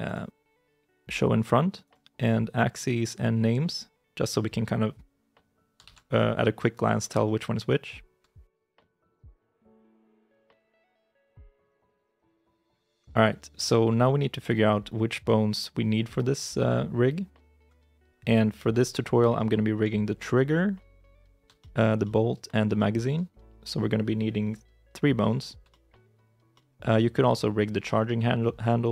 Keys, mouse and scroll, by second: 6.6 shift+z, 7.1 shift+middle click, 10.6 shift+middle click, 11.2 shift+middle click, 11.5-12.4 scroll down 1, 18.0-19.0 scroll up 1, 19.2 shift+i, 19.4 shift+middle click, 19.9 scroll up 1, 21.4 shift+i, 21.5 shift+middle click, 22.6 shift+middle click, 23.3-25.1 scroll down 1, 25.1 middle click, 25.6 shift+middle click, 26.4 shift+middle click, 26.8 middle click, 27.2 scroll up 1.